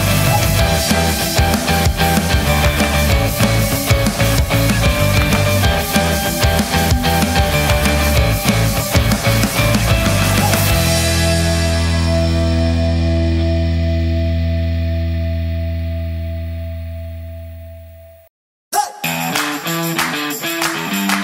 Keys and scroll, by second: 21.0 |, 21.1 0.